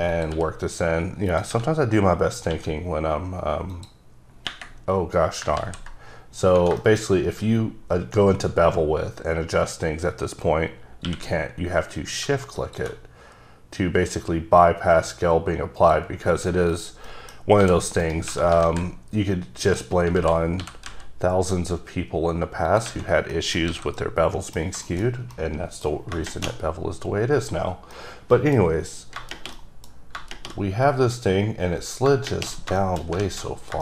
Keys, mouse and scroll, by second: 0.2 click, 0.4 e, 1.4 click, 1.8-2.6 scroll up 2, 2.6 q, 3.8 click, 5.0-5.5 scroll down 5, 5.7 z, 6.3-6.7 scroll up 4, 6.9 shift+middle click, 7.2-8.0 scroll up 2, 8.4-10.5 scroll down 1, 11.2 q, 12.7 shift+click, 15.9 click, 16.4 scroll down 3, 16.8 click, 17.2 middle click, 17.5 scroll up 2, 17.7 g, 18.1 right click, 18.8 alt+z, 19.8 click, 20.3 alt+z, 20.7 g, 21.0 z, 22.8 click, 23.1 scroll down 3, 23.4 scroll up 1, 23.4 middle click, 23.8 alt+a, 24.1 middle click, 24.6 scroll down 1, 25.0 shift+middle click, 25.1 scroll down 1, 25.4 middle click, 28.0 middle click, 29.7 middle click, 32.9 shift+middle click, 33.3 alt+z, 33.4-33.8 alt+scroll down 3.